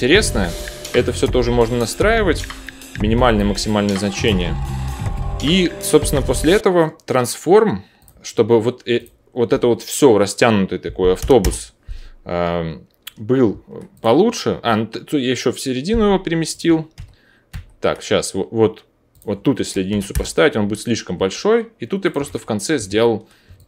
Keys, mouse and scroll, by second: 3.8 ctrl+z, 8.0-9.1 drag, 16.5-19.2 ctrl+drag, 16.9 ctrl+z, 19.2-20.5 middle drag, 21.1 middle click, 22.0-23.5 ctrl+drag, 22.2 ctrl+z, 23.5-23.6 alt+middle drag.